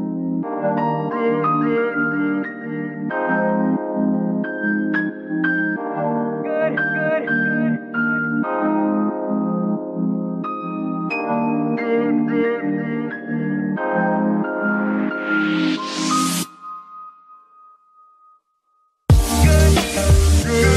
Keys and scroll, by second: 3.3 Tab, 6.0 Tab, 8.1 s, 8.9 Tab, 14.7 ctrl+KP_3.